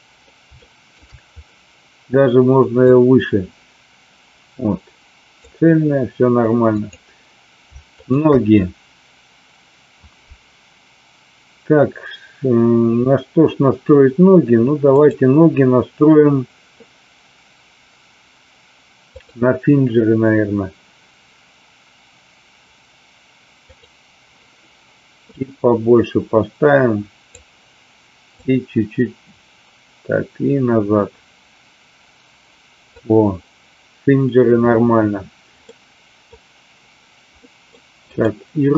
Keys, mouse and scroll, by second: 0.5-1.1 shift+middle drag, 2.8-5.4 drag, 8.0 shift+click, 14.8-19.4 drag, 23.6 click, 25.2-27.3 drag, 28.3-32.9 drag, 35.7 middle click, 37.5 middle click, 38.0 click.